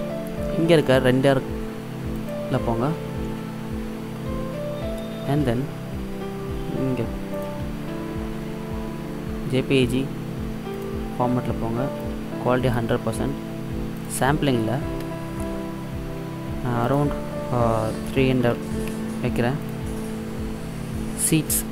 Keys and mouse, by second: 2.2-4.1 drag, 7.5-9.4 drag, 12.1-15.9 drag, 16.9-18.8 drag, 18.9 KP_0.